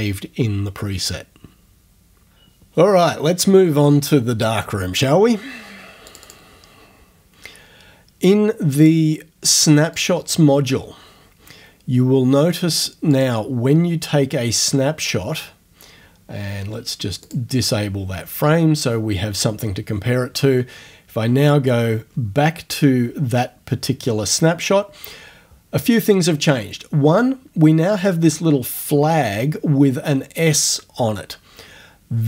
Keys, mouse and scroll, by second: 6.1 click, 8.8 click, 10.0 click, 13.1 click, 17.2 click, 21.5 click.